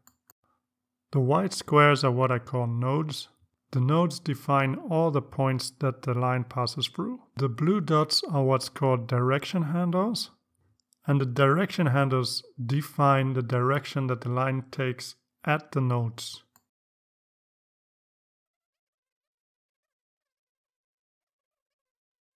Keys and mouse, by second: 0.0 click, 0.8-1.5 drag, 1.9 click, 3.2-4.8 drag, 5.3-5.9 drag, 6.5 click, 7.9 click, 9.9-11.9 drag, 12.9-16.3 drag, 17.1 click, 19.0 click, 19.8 click, 20.3-20.7 drag, 20.9 click, 21.5 click.